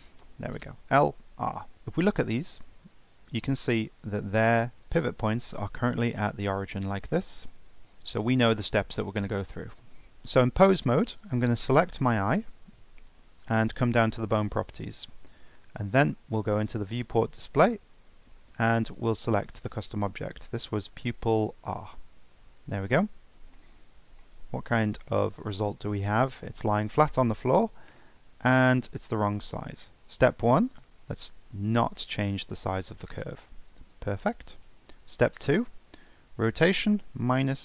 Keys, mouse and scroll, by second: 1.0-1.7 drag, 2.8 r, 7.8-10.1 middle drag, 10.1-11.2 scroll up 2, 11.2 click, 12.1-15.2 shift+middle drag, 16.4-17.5 drag, 17.5-18.9 scroll down 6, 18.9-21.9 drag, 23.5-30.9 middle drag, 30.9 click, 31.5 scroll down 5, 32.0-35.0 middle drag, 36.0-37.6 drag.